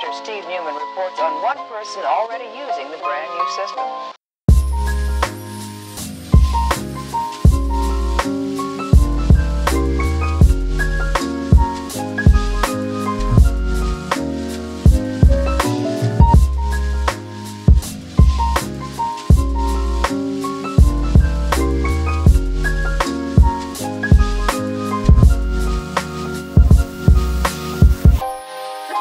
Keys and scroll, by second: 21.2 super+z.